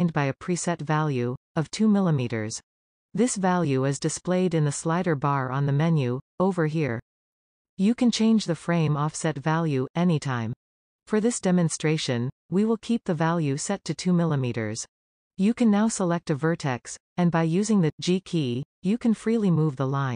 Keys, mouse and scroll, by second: 9.4-11.2 drag, 11.8-14.4 drag, 15.9 middle click, 18.0 g.